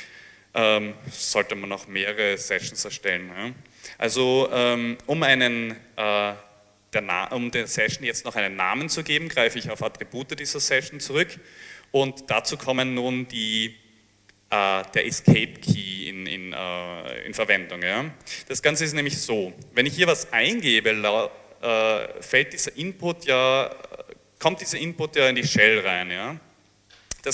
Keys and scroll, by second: 20.2-21.3 typing.